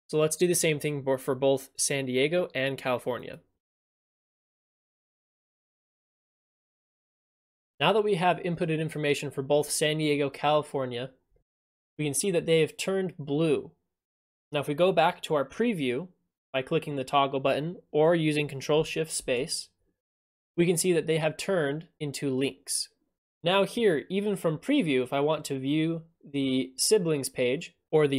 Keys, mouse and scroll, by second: 3.2 click, 3.4 click, 3.6 click, 3.8-7.1 typing, 5.6 click, 5.9 click, 7.3 click, 18.4 click.